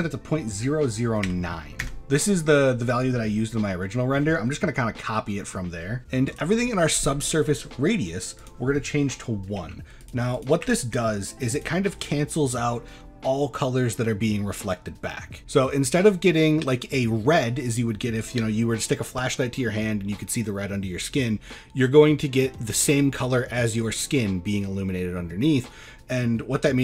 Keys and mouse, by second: 6.3-11.6 drag.